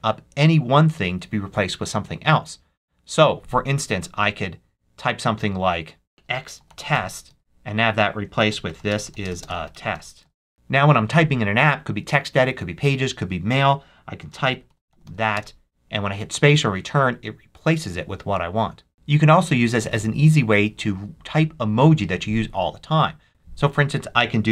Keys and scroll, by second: 5.9-10.3 typing, 14.0-15.4 typing, 23.3 BackSpace.